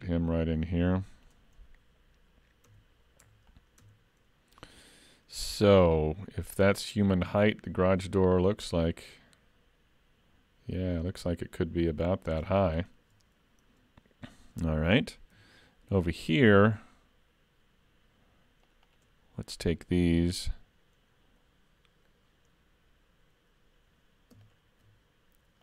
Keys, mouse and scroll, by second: 2.7 Tab, 3.2 Tab, 3.5 click, 3.8 Tab, 6.0 click, 12.7 shift+middle click, 13.7-14.9 scroll down 1, 15.3 ctrl+r, 20.1 s, 24.4 alt+click.